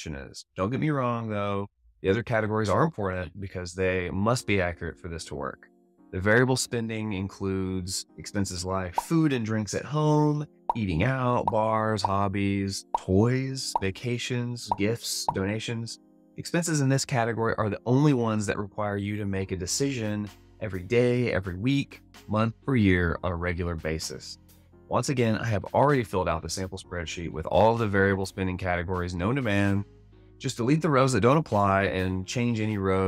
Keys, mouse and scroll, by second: 24.8 alt+a.